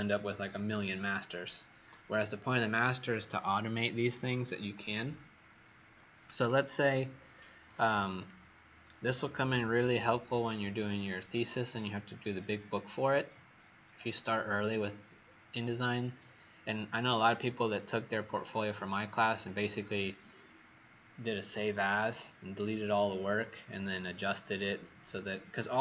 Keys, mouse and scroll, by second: 6.3 click, 7.0-7.3 alt+scroll down 2, 8.1 alt+scroll down 1.